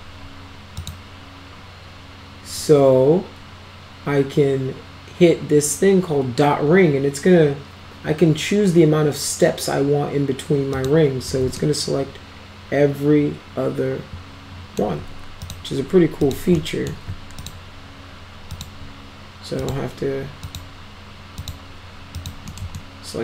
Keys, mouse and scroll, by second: 0.8 click, 10.8 click, 11.6-14.8 alt+middle drag, 15.4 ctrl+click, 16.2 ctrl+click, 16.5-16.9 alt+middle drag, 17.4 ctrl+click, 18.5 ctrl+click, 19.6 ctrl+click, 20.4 ctrl+click, 21.4 ctrl+click, 22.2 ctrl+click, 22.5 middle click, 22.8 alt+middle click.